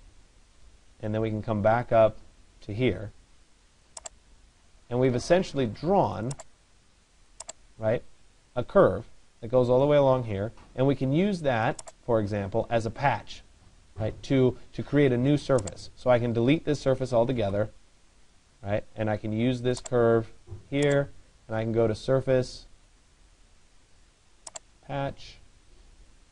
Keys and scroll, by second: 17.1 Delete.